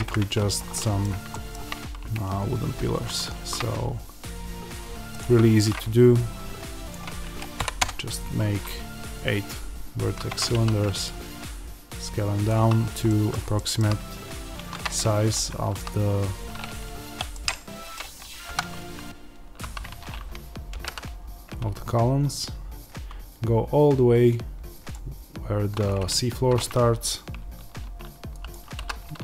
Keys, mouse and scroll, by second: 0.0-2.7 middle drag, 1.0 scroll down 1, 2.7 shift+right click, 7.7-12.4 drag, 10.2 Tab, 10.4 s, 13.0-24.8 middle drag, 14.5 shift+Tab, 15.4 shift+Tab, 16.9 o, 18.4 KP_1, 19.5 z, 24.8 click, 26.0 click, 28.7-29.2 drag, 28.7 s.